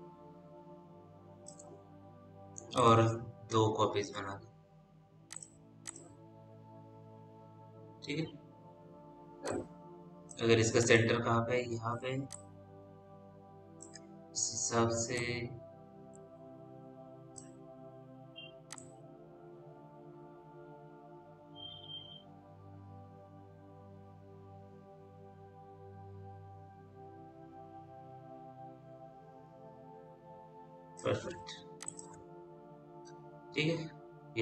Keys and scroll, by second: 32.4 p.